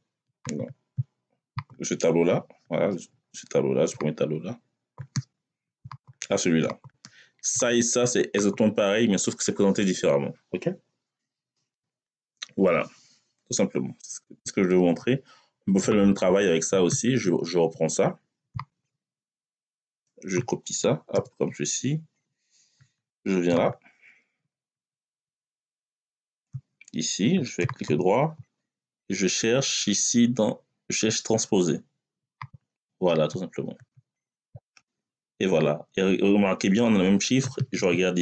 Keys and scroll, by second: 20.9 ctrl+c, 24.6 Down.